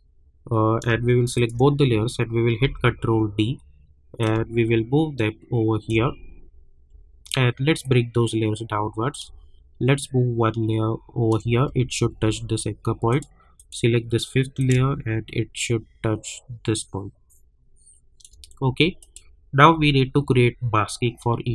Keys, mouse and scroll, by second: 1.4 shift+click, 2.6 ctrl+d, 3.5-4.2 scroll down 1, 4.5-6.0 shift+drag, 6.3-7.8 alt+scroll up 2, 8.1 click, 11.8 alt+scroll up 1, 13.1 click, 14.1-14.6 scroll down 1, 14.6-19.0 drag, 19.9-20.3 alt+scroll down 1.